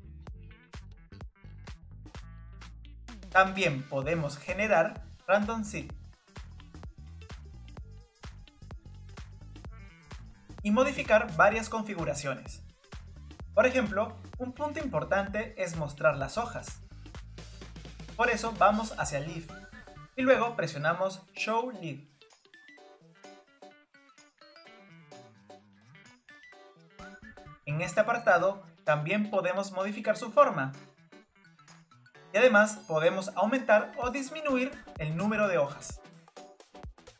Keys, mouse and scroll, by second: 2.3-3.4 shift+middle drag, 3.4-5.1 scroll up 2, 5.1 scroll up 1, 5.3-17.2 drag, 17.8-22.0 drag, 24.9-27.2 drag, 27.2 scroll up 2, 29.2-34.9 drag.